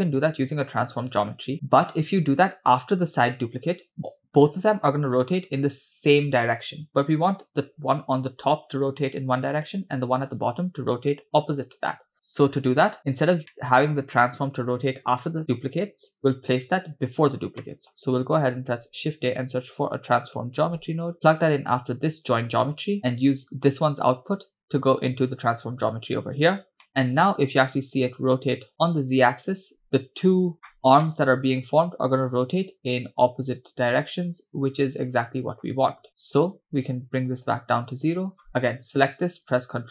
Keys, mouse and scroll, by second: 0.7 click, 5.1-7.6 scroll up 2, 7.6 scroll up 1, 7.6-8.0 scroll down 2, 12.5-13.3 scroll up 3, 13.5 middle click, 14.1-14.8 scroll down 1, 14.8-16.1 scroll down 1, 17.6 middle click, 18.6 shift+a, 23.0 click, 23.7 click, 24.4-26.0 drag, 26.8 middle click, 27.0-27.8 scroll up 2, 27.9-30.5 shift+drag, 30.8 scroll up 6, 31.1-31.4 shift+middle drag, 32.3-35.6 drag, 36.4-37.6 drag, 38.4-38.9 scroll down 2, 39.0 click.